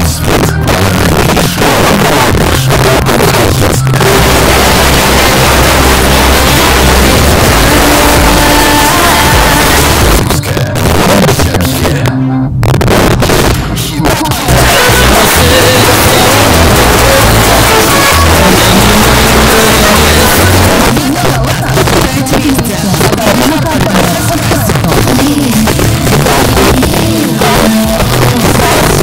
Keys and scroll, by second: 10.2 Page_Down, 20.7 Page_Down.